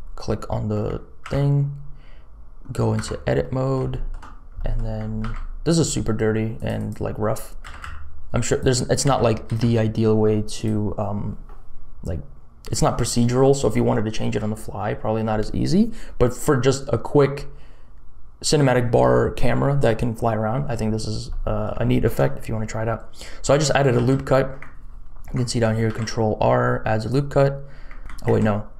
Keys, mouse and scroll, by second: 1.2 ctrl+r, 3.0 Tab, 3.6 middle click, 4.1 shift+middle click, 4.5 middle click, 5.2 ctrl+r, 7.6 s, 9.0 s, 21.4 middle click, 21.8 shift+middle click, 24.1 ctrl+z, 25.9 ctrl+r, 28.3 ctrl+z.